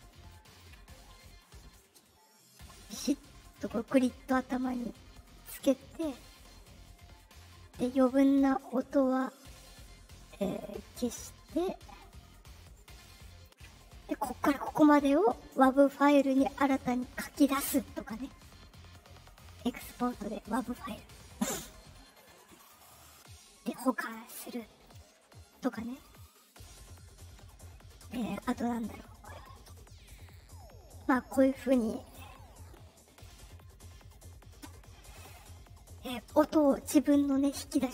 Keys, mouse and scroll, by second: 0.2 ctrl+click, 0.8-3.5 drag, 5.3-7.2 right drag, 9.1-10.5 drag, 11.8-13.3 right drag, 15.7 click, 21.3 click, 23.9 click, 26.4 right click, 26.8 right click, 28.3 right click, 28.7 right click, 29.8 click, 30.1 click, 37.6 right click.